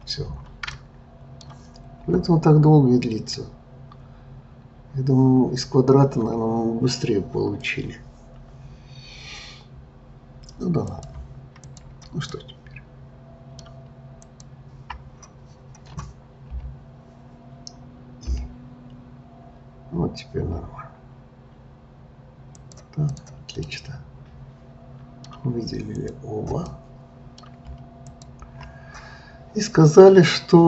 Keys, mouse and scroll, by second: 0.7-3.8 middle drag, 10.9 click, 12.2-14.2 middle drag, 14.2 shift+click, 16.5 i, 18.2 i, 23.0 click, 23.7-26.0 middle drag, 26.0 click, 26.7-28.0 middle drag, 28.0 shift+click.